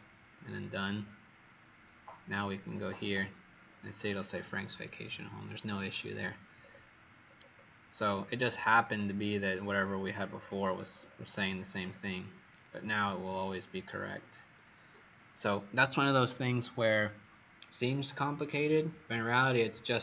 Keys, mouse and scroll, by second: 3.0 click, 6.5-7.1 alt+scroll down 2, 9.6-10.8 scroll down 11, 10.8-11.6 scroll down 7, 11.6-12.6 scroll down 5, 12.6-13.4 scroll down 2, 13.4 scroll down 1.